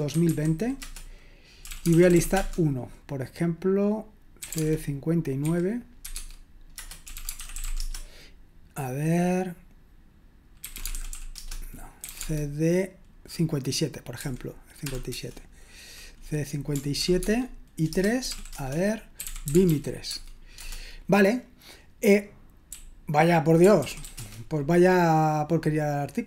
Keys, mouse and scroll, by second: 0.0-2.6 typing, 4.2-8.1 typing, 10.3-12.5 typing, 14.2-14.8 typing, 15.1 Return, 17.0 ctrl+p, 17.2 Tab, 17.9 Return, 18.0-21.0 typing, 23.1-24.5 typing.